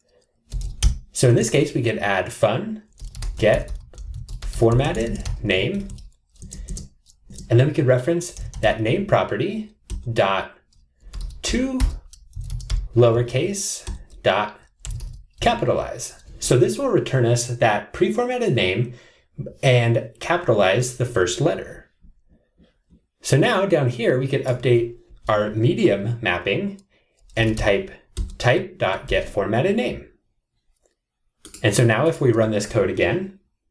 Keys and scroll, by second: 31.4 Return.